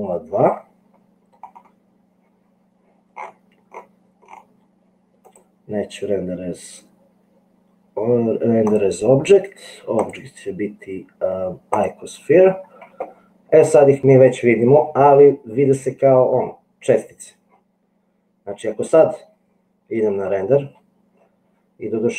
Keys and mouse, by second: 5.3-8.9 drag, 10.1-12.3 drag.